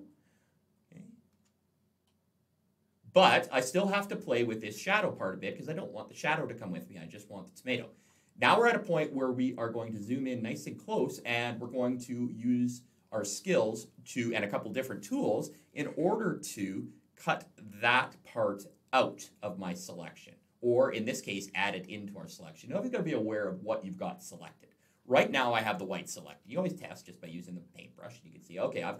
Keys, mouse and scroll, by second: 0.1-1.3 alt+scroll up 1, 1.9 middle click, 8.4-9.6 alt+scroll up 1, 26.0 click, 26.8 click.